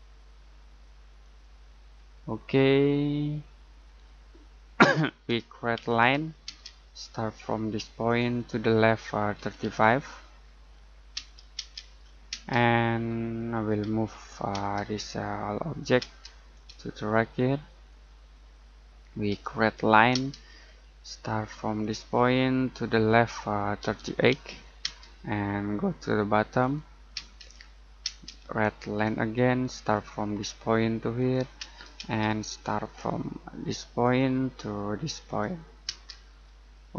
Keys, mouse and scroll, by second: 1.2 click, 1.9-2.6 scroll down 1, 3.1 middle click, 3.8-4.3 scroll down 1, 4.3 middle click, 5.7 l, 6.4 space, 6.8-8.0 scroll up 1, 8.0 click, 9.3 typing, 10.6-11.5 typing, 13.0-13.3 scroll down 1, 13.3 middle click, 13.8 m, 14.5 space, 14.9 click, 16.5 click, 18.5 middle click, 19.3 l, 20.1 space, 20.5-21.8 scroll up 1, 21.8 click, 22.1-23.8 scroll down 1, 23.8-24.8 typing, 26.6 click, 27.1 space, 27.5-28.0 scroll up 1, 28.0 space, 29.7 click, 31.5 space, 34.0 click, 35.8 space, 36.2-36.8 scroll down 1, 36.8 middle click.